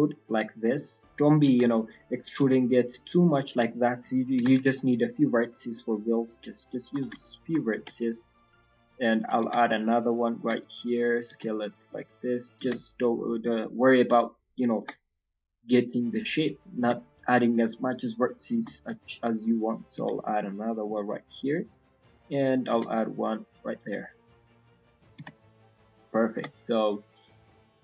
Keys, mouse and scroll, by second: 1.4 r, 7.1 shift+middle click, 7.7 e, 9.3 r, 21.7 shift+middle click, 22.7 e, 23.8 s, 27.2 middle click, 27.6 shift+middle click.